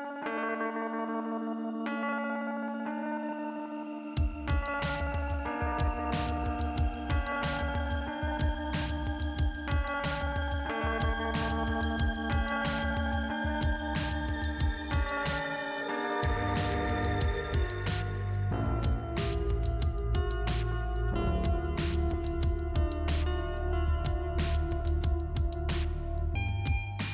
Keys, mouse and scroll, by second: 0.1 click, 0.2 click, 1.7 click, 2.5 click, 2.7 click, 3.7 right click, 4.7 click, 4.9 click, 9.0 click, 9.2 click, 11.6 click, 11.8 click, 13.8 click, 14.3 click, 15.2 click, 15.3 click, 15.6 double click, 15.7 double click, 15.8 double click, 16.8 double click, 16.9 click, 17.0 click, 20.6 click, 20.8 click, 20.8 click, 20.9 click, 21.0 click, 21.1 click, 21.2 double click, 21.3 double click, 21.3 double click, 21.4 double click, 21.5 double click, 21.6 double click, 21.6 double click, 21.8 double click, 21.9 double click, 22.0 double click, 22.8 click, 22.9 click, 25.5 click, 25.6 click, 25.7 click, 26.7 click, 26.9 click.